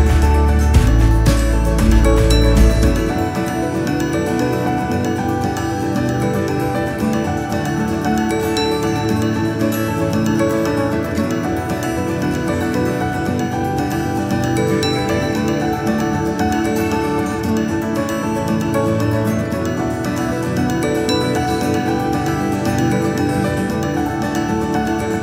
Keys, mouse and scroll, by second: 2.9 s, 8.3 KP_7, 8.9-11.3 scroll up 4, 11.3 s, 14.6-15.3 KP_2, 16.7 ctrl+KP_1, 17.8-18.2 scroll up 2, 18.3 scroll down 1, 19.3 KP_8, 23.8 s.